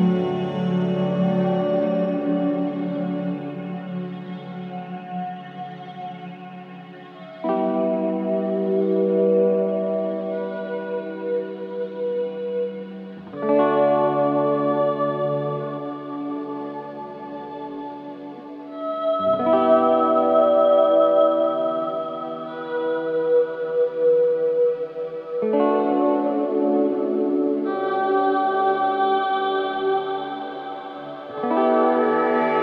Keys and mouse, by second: 3.5 click, 3.9-4.6 typing, 6.1-6.9 typing, 6.4 click, 9.3 click, 10.3 alt+click, 10.9 alt+shift+click, 11.4 alt+click, 12.1 g, 12.4 y, 13.4 click, 14.8-16.7 drag, 17.3 alt+shift+drag, 17.8 alt+click, 18.5 space, 19.2 space, 19.6 click, 22.6-24.1 drag, 24.3-26.3 drag, 26.5-29.0 drag, 29.0 space, 29.9-32.2 drag, 30.7 space, 32.2 space.